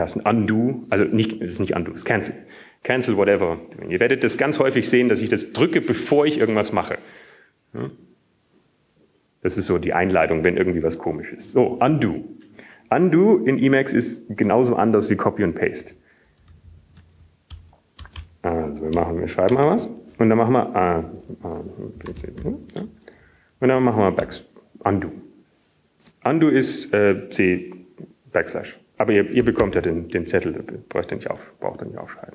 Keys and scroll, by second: 2.6 ctrl+], 2.6 ctrl+g, 18.6 Down, 19.8 Up, 19.8 Right, 20.4 Right, 20.9 Return, 20.9 \, 22.2 Return, 22.2-23.1 typing, 22.5 Return, 24.6-27.6 typing.